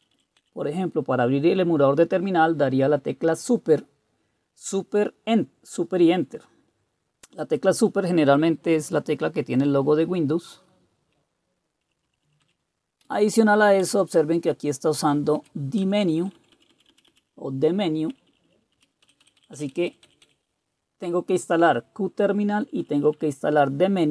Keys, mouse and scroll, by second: 0.0 Up, 0.1 Up, 0.4 Up, 11.8 Down, 12.0 Down, 12.2 Down, 12.4 Down, 13.0 Down, 13.8 Up, 15.4 Down, 15.8 Left, 16.0 Left, 16.2 Left, 16.4 Left, 16.5 Left, 16.7 Left, 17.1 Left, 18.1 Down, 18.3 Down, 19.1 Up, 19.2 Up, 19.7-20.1 Up, 20.2 Up, 22.6 Down, 22.8 Down, 23.0 Down, 23.1 Down.